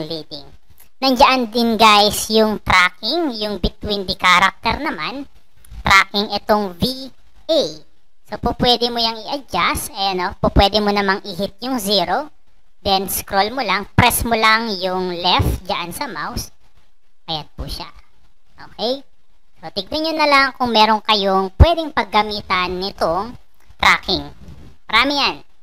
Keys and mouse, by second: 12.8-23.4 drag.